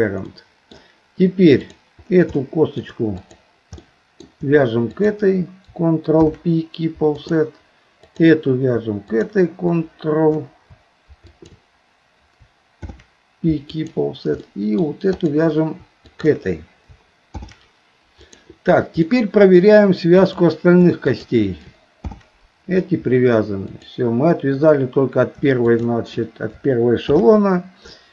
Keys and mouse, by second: 0.4 middle click, 2.4 shift+middle click, 3.2 click, 3.9 middle click, 6.2 ctrl+p, 8.0 click, 9.2 click, 12.8 ctrl+p, 14.4 middle click, 15.2 click, 16.1 shift+click, 17.3 ctrl+p, 19.0 middle click, 20.2 click, 21.2 click, 22.0 ctrl+p, 25.8 shift+click, 27.0 ctrl+p.